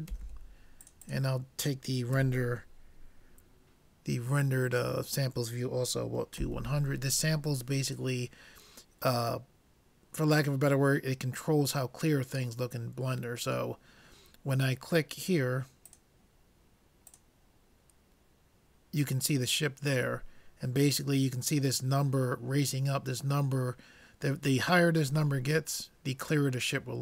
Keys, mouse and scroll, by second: 0.3 0, 1.0-2.9 drag, 6.6 0, 15.9-17.5 drag.